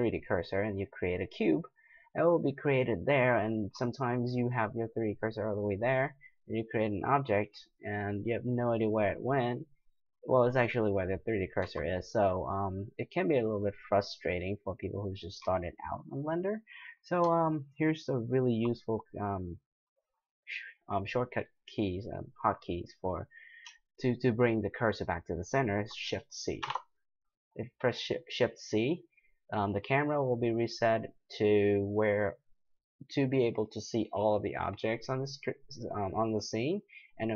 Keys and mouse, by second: 5.0-8.5 drag, 11.6 x, 14.8-15.9 middle drag, 15.4 x, 26.6 shift+c.